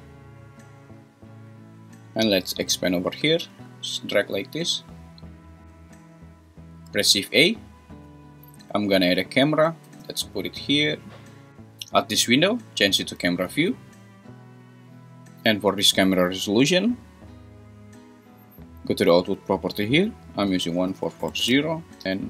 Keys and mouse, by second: 3.4-4.9 drag, 5.6 `, 5.6 x, 5.7 `, 6.9 shift+a, 9.3 `, 9.9 g, 10.8 click, 12.8 `, 20.4-21.6 drag, 21.0 4.